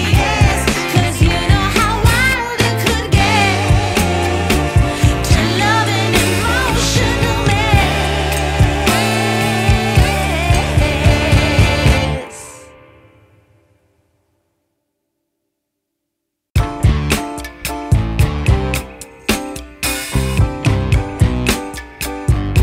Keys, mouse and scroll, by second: 0.2 click, 4.2 click, 6.2 click, 10.7 shift+d, 12.5 click, 15.2 click, 16.5 click, 21.8 Tab.